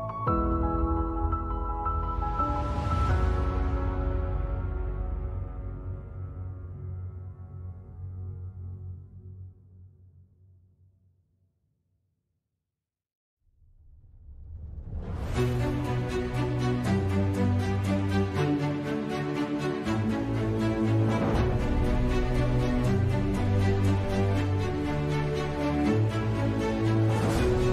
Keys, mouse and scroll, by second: 0.4 Tab, 0.7 g, 2.2 Tab, 3.0 ctrl+s, 6.8 right click, 7.0 Tab, 7.3 shift+s, 8.9 right click, 9.0 shift+s, 9.3 Tab, 9.4 shift+a, 12.3 KP_Divide, 12.6 KP_5, 12.9 KP_1, 13.7 Tab, 14.2 z, 14.5 a, 14.7 b, 15.1 click, 16.1 KP_1, 16.9 e, 17.3 ctrl+z, 17.6 x, 19.0 Tab, 19.5 z, 19.6 Tab, 20.4 f, 20.6 Tab, 20.9 KP_Divide, 21.8 KP_5, 21.9 KP_3, 22.0 KP_Decimal, 22.4 g, 26.3 r.